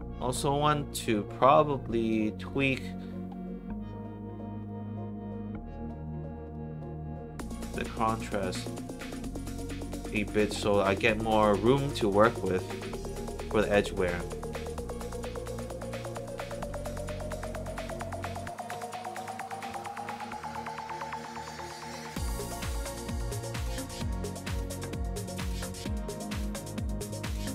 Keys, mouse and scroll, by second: 0.1 middle click, 0.9 middle click, 1.8 click, 2.4 click, 2.5 click, 4.6-5.8 drag, 6.4 click, 7.5-9.7 drag, 13.8 middle click, 14.6 middle click, 16.0 middle click, 16.6 click, 18.6 click, 19.4 click, 19.6 1, 20.8 alt+right click, 21.8 alt+click, 22.3 alt+middle click, 23.0 alt+click, 25.1 click, 25.3 click, 26.7 click.